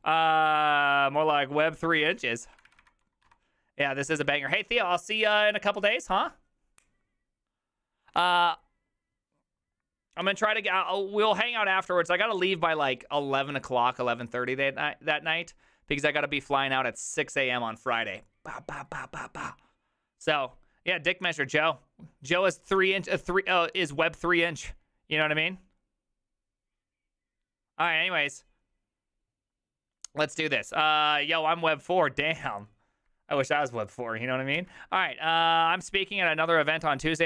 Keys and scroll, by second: 2.1 alt+r, 2.4 Right, 2.6 Right, 2.7 Right, 2.8 Right, 3.3 Escape, 34.7 alt+{.